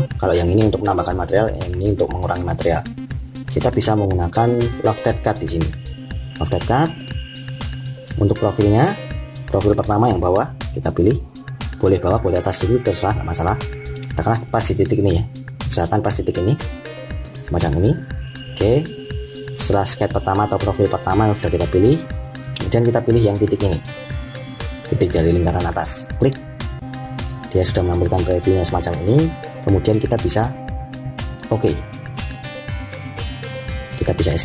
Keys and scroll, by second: 34.3 Escape.